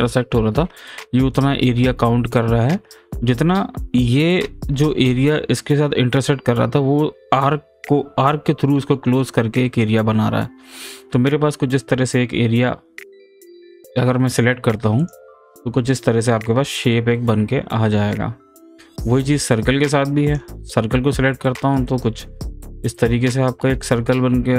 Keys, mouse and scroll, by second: 15.0 click, 15.9-20.3 middle drag, 20.3 click, 21.3-22.8 middle drag, 22.8-24.5 drag.